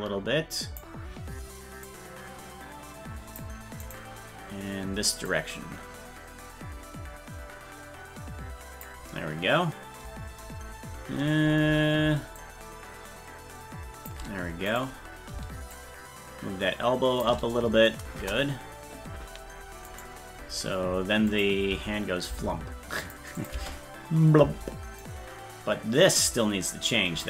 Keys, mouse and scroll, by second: 1.8-3.4 drag, 4.0 right click, 5.3-8.8 drag, 12.4-14.1 shift+drag, 14.8 right click, 15.7-17.2 shift+drag, 18.2 KP_0, 19.9-21.3 right drag, 21.3 click, 21.7 space, 23.0 click, 23.4 click, 25.0-27.2 drag.